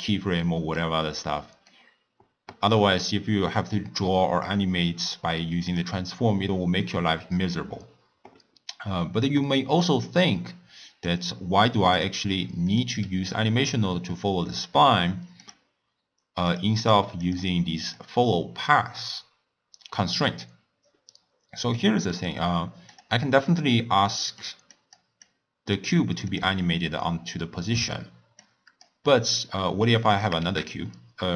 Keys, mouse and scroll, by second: 0.8-1.7 scroll down 2, 1.7-4.7 middle drag, 5.0 click, 5.7 drag, 9.8 drag, 11.0 click, 12.0 drag, 12.7 click, 15.3 click, 16.5 click, 16.8 click, 17.2 click, 17.8 click, 21.8-22.9 middle drag, 22.9 click, 24.1-24.7 middle drag, 24.7 click, 25.2 click, 26.3 click, 28.4-29.1 drag, 29.1 middle click, 30.1 click, 30.4 shift+a.